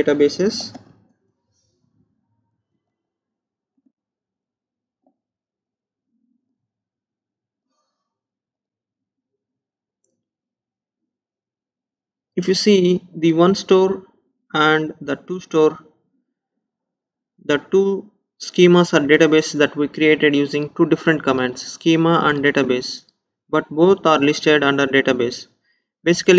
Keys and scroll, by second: 0.9 space.